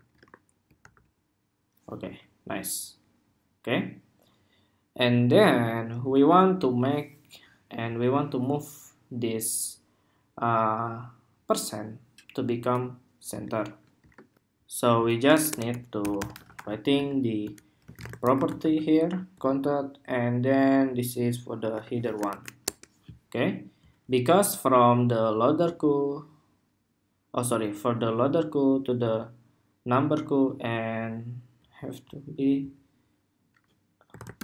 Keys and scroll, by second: 0.0 super+Tab, 0.5 super+r, 13.1 super+Tab, 14.1 shift+super+2.